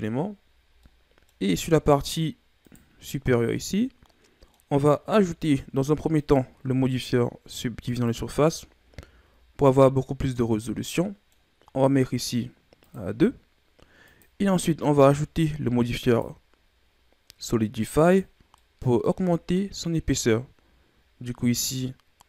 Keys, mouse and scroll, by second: 0.5 scroll down 3, 0.8 middle click, 1.4-2.6 scroll up 5, 2.6 right click, 3.0-4.6 middle drag, 4.6-6.1 scroll up 1, 6.1-8.6 drag, 8.6-9.2 scroll up 3, 9.3-9.7 scroll up 1, 9.7-12.8 middle drag, 12.8-14.8 drag, 14.8-16.0 scroll up 2, 16.0-18.5 drag, 18.5 middle click, 19.2-19.8 scroll up 4, 21.5-22.2 drag.